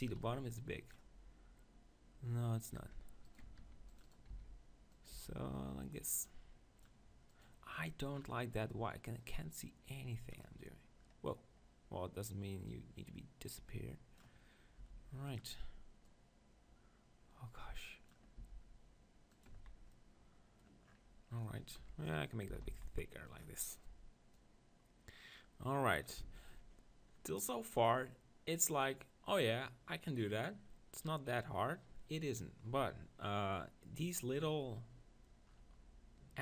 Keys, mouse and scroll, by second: 0.3-1.6 drag, 3.4 right click, 3.6 ctrl+r, 3.6 click, 4.3 s, 5.2 Tab, 8.1 click, 9.1 middle click, 9.3-11.2 drag, 12.7-14.5 drag, 14.8 s, 15.4-17.9 drag, 18.4 s, 19.4-21.2 drag, 19.5 z, 19.9-22.8 middle drag, 21.8 KP_1, 22.5 s, 24.3-26.1 drag, 26.2 z, 28.1-29.4 middle drag.